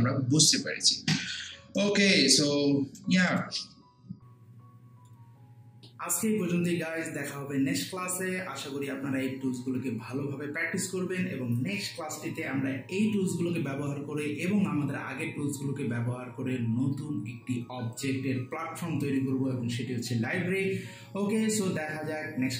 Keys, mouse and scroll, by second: 1.8-3.3 right drag, 3.3 click.